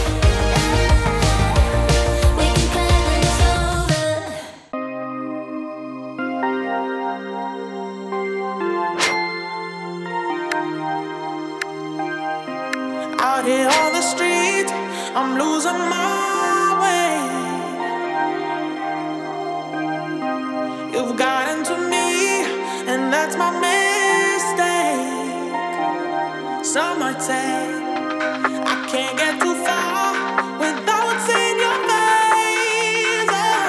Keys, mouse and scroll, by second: 0.4-1.6 typing, 1.8 Return, 2.7 space, 5.1-8.9 drag, 10.4 space, 13.6-23.8 drag, 25.0 space, 27.2 space, 28.3-33.6 drag.